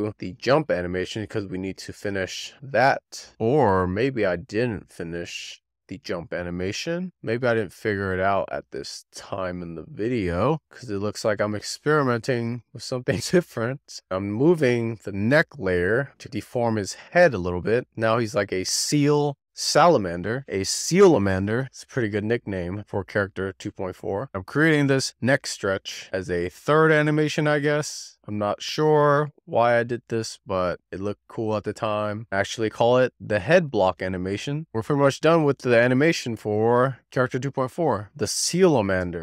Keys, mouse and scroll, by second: 3.8 shift+middle click, 7.0 click, 7.2 click, 7.4 click, 7.5 shift+middle click, 7.7 click, 7.7 scroll down 3, 8.0-8.4 shift+middle drag, 8.4 scroll up 1, 8.5-9.5 shift+middle drag, 9.5 click, 11.9 z, 12.1-13.0 shift+middle drag, 13.0 click, 14.4 z, 14.5-15.0 middle drag, 15.0 scroll up 1, 15.2-15.7 scroll down 1, 15.7 click, 16.7 z, 16.9 alt+middle click, 17.1 alt+middle click, 17.1 scroll up 3, 17.5 click, 19.8 z, 20.4-21.5 drag, 21.5 i, 22.9 click, 24.1-24.5 scroll down 1, 24.5 click, 25.4-25.9 scroll down 1, 25.9 click, 27.2 click, 28.6-29.1 drag, 29.1 shift+d, 29.5 click, 31.5 click, 34.3-36.1 drag, 36.7-39.2 drag.